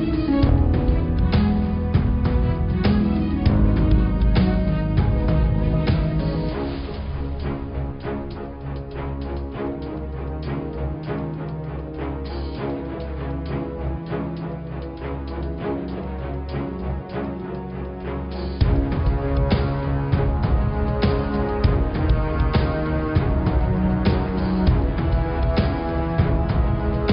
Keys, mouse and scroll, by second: 1.2 click, 1.9 click, 3.7 scroll up 1, 3.7 middle click, 4.2 scroll down 3, 4.4 middle click, 5.2 click, 6.0 shift+click, 6.5 shift+click, 7.1 shift+click, 7.8-8.4 scroll up 1, 8.4 ctrl+z, 9.0 shift+click, 9.7 shift+click, 10.0 shift+click, 10.6 shift+click, 11.6 ctrl+j, 13.6 click, 14.4 click, 18.4 Tab, 18.8 click, 19.1-19.4 scroll down 3, 19.4 Tab, 19.7 Tab, 19.9 click, 20.3-21.6 middle drag, 21.6 click, 24.1 Tab, 24.9 click, 25.2 click, 25.4-25.8 scroll down 1, 25.8 middle click, 26.2-26.6 scroll up 4, 26.6-27.1 middle drag.